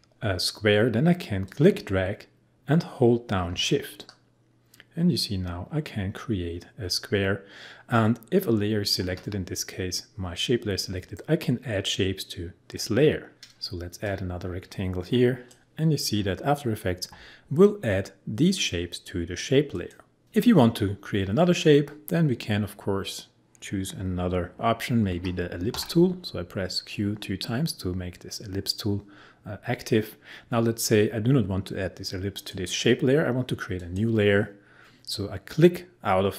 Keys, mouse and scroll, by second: 1.4-11.4 drag, 12.8 click, 13.3 ctrl+z, 14.0-17.9 drag, 19.8 click, 25.1 q, 25.7 q, 32.4 click.